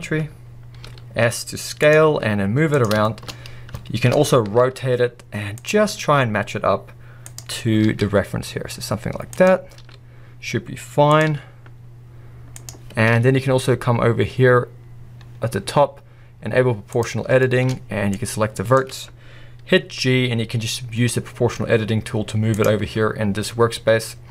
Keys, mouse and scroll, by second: 0.8 s, 1.9 click, 2.1 g, 2.8 click, 4.5-5.8 middle drag, 4.5 r, 5.9 s, 7.8 g, 9.4 click, 9.8 s, 11.2 click, 11.3 g, 16.9 click, 19.8 g, 22.6 click, 23.0 click, 23.7-24.3 drag.